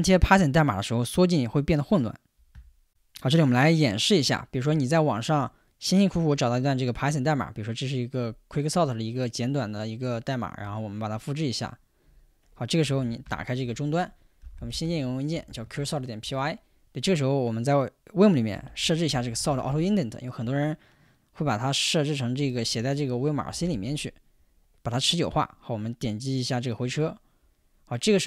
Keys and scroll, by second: 13.0-15.8 typing, 16.3 Return, 18.4-20.2 typing, 20.4 Tab, 22.4-23.2 typing, 24.3-25.1 typing, 26.8 Return.